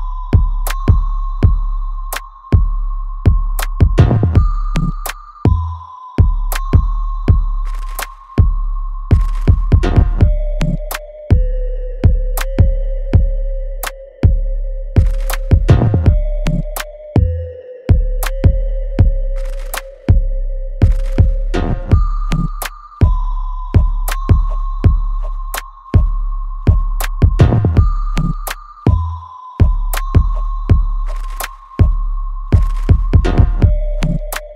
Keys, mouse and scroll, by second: 0.4 alt+right click, 1.8-4.9 drag, 4.9-9.2 ctrl+drag, 9.2 right click, 9.9 click, 10.1 alt+right click, 10.6-12.3 alt+drag, 12.3 click, 12.7-14.2 alt+drag, 14.2 alt+right click, 14.5-16.3 alt+drag, 16.3 alt+right click, 16.7 alt+middle click, 17.1 alt+right click, 17.8 alt+middle click, 18.2 alt+right click, 19.2 click, 20.2 alt+right click, 21.3 alt+middle click, 22.0 click, 22.3 alt+right click, 23.3 click, 25.5 alt+right click, 26.4 click, 26.7 alt+click, 27.3 alt+middle click, 27.7 right click, 29.5 alt+middle click, 29.9-31.7 alt+right drag, 31.7 click, 34.0 alt+right click, 34.4 alt+click.